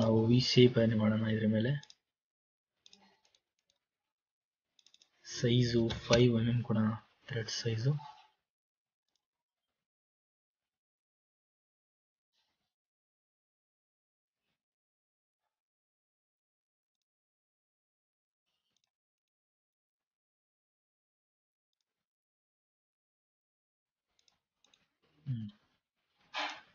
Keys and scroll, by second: 6.0 KP_5, 6.3 Return.